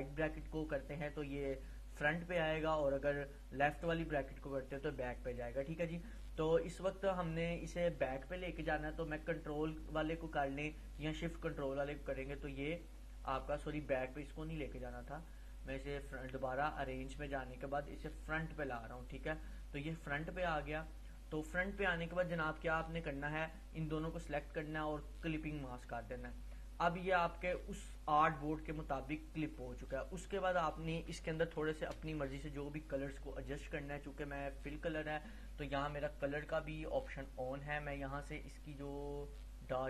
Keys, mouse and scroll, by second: 11.6 click, 15.1 right click, 18.8-19.4 drag, 23.0-23.6 drag, 24.3 right click, 25.5-28.2 drag, 30.1-30.4 scroll down 1, 31.3 space, 31.4 click, 31.8 space, 32.2 click, 34.8 click, 39.1-39.8 drag.